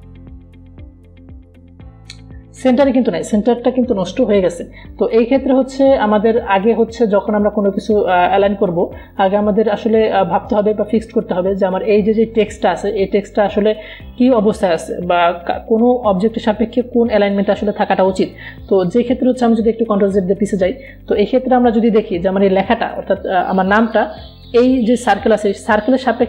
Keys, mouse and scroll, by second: 1.9 click, 20.8 click, 21.4 ctrl+z, 22.5-26.2 drag.